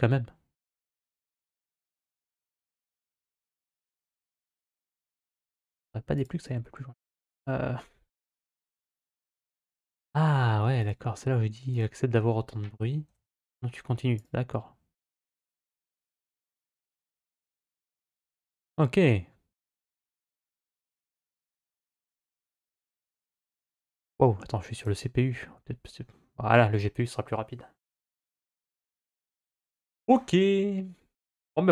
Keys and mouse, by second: 6.1-9.6 drag, 10.7-14.1 drag, 23.9-24.9 drag.